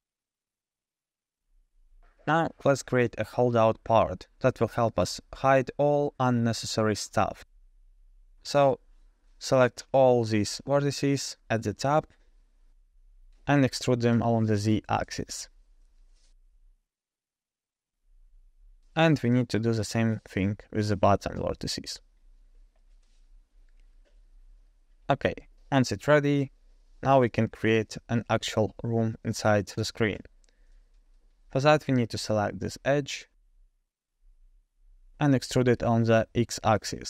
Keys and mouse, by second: 3.9 KP_0, 4.5-5.1 middle drag, 5.6-6.1 middle drag, 8.3 Tab, 8.8 middle click, 9.4 alt+2, 9.8 alt+click, 13.7 KP_0, 15.0 e, 19.3 alt+click, 20.2 e, 24.9 KP_0, 26.4 KP_0, 27.2 click, 28.4 g, 31.5 middle click, 32.4 2, 33.1 middle click, 36.8 e.